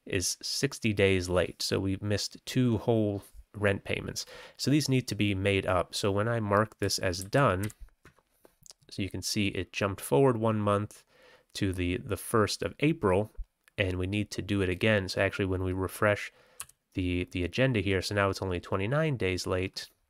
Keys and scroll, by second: 7.2 ctrl+c, 7.6 ctrl+t, 16.5 g.